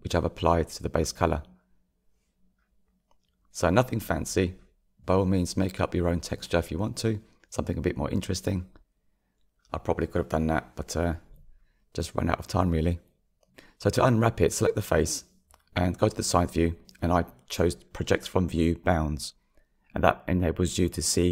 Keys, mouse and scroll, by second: 2.0-2.8 scroll down 1, 2.8-3.2 scroll down 1, 4.8 KP_3, 5.5-7.3 shift+middle drag, 7.3-8.1 scroll up 4, 8.1-21.3 shift+middle drag.